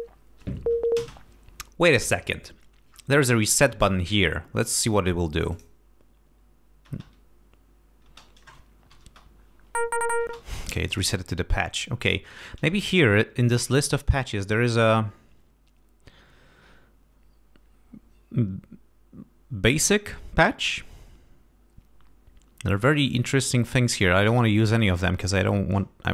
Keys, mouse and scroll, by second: 1.0 space, 5.5 click, 6.9 space, 8.1 space, 8.9 Home, 9.1 space, 10.2 space, 11.0 click, 12.0-12.3 scroll up 1, 13.6-14.7 scroll down 2, 23.4-23.9 scroll up 2.